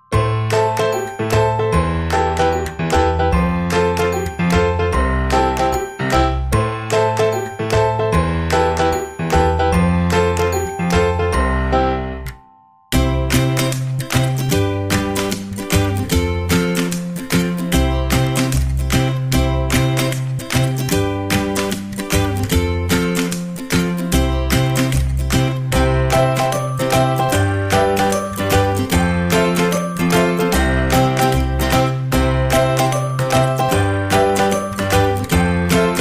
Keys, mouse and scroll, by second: 0.5-2.4 middle drag, 2.4-4.8 drag, 5.3-7.1 middle drag, 8.3-10.0 drag, 10.7-13.8 middle drag, 15.1-17.0 drag, 17.9-19.6 drag, 18.5-20.2 middle drag, 19.7 click, 21.0-22.8 drag, 21.7-23.5 middle drag, 25.2-27.4 middle drag, 30.1 Tab, 30.5 middle click, 31.2 KP_7, 31.4 middle click, 33.2 a, 33.8 c.